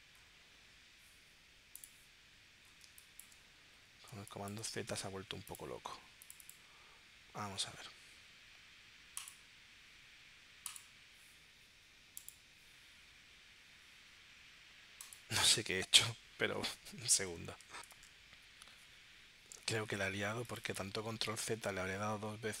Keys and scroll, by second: 4.1 space.